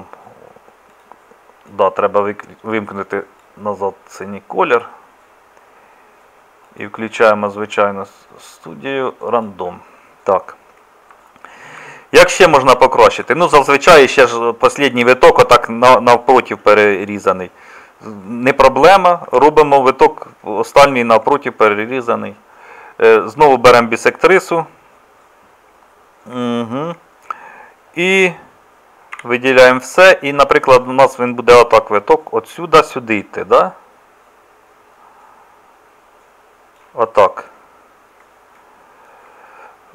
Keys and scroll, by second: 19.3 Tab, 29.2 a.